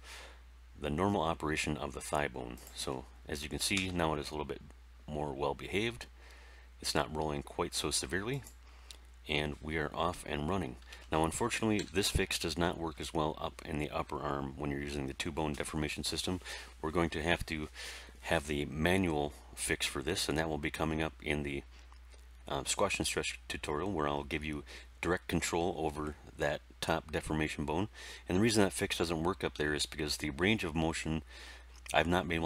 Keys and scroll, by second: 3.7 r, 11.7 End.